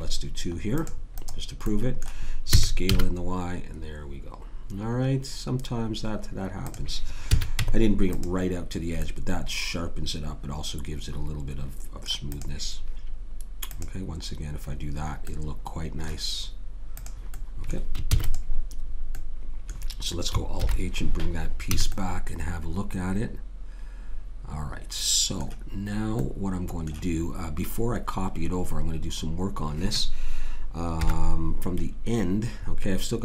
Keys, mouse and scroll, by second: 2.5 s, 7.3 a, 7.6 Tab, 10.1 middle click, 12.3-15.4 drag, 15.7 middle click, 16.9 click, 18.1 ctrl+s, 20.6 alt+h, 21.8 a, 21.9-23.8 middle drag, 26.3-31.0 middle drag, 31.0 KP_1.